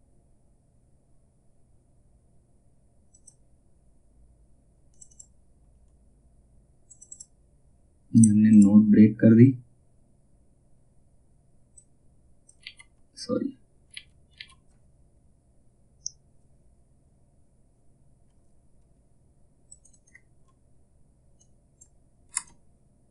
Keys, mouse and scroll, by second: 2.6 click, 11.3 click, 12.1 ctrl+z, 19.2 click, 21.8 space, 22.7-23.1 drag.